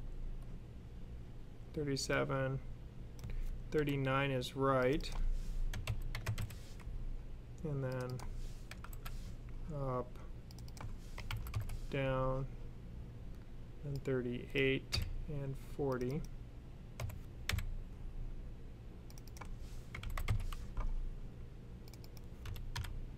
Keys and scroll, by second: 2.6 typing, 3.6 typing, 5.6-6.2 typing, 8.3-9.1 typing, 10.8-11.5 typing, 14.5-15.3 typing, 16.8-17.3 typing, 19.5-20.3 typing, 22.1-22.8 typing.